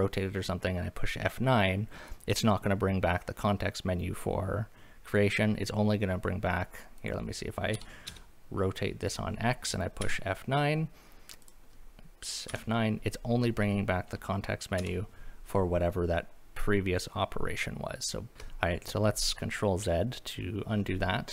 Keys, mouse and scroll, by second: 7.0 click, 7.7 r, 8.1 x, 9.1 click, 10.0 F9, 11.4 click, 12.5 F9, 14.8 F9, 18.3 ctrl+z.